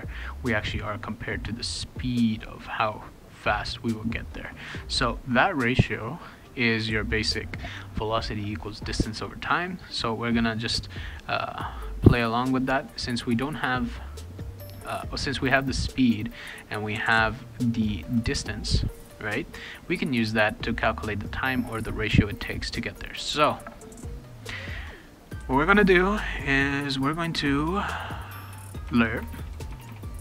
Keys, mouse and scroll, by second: 6.0 click, 6.9 r, 16.0 click, 16.2 click, 18.4 click, 18.6 click, 20.6 click, 20.8 click, 27.8-29.9 typing.